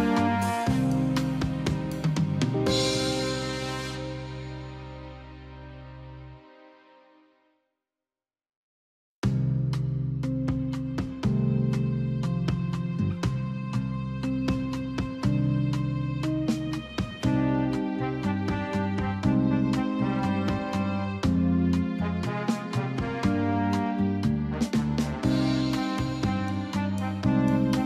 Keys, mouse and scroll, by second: 11.3 right click, 12.2 click, 15.7 click, 21.8 alt+shift+click, 23.6 click.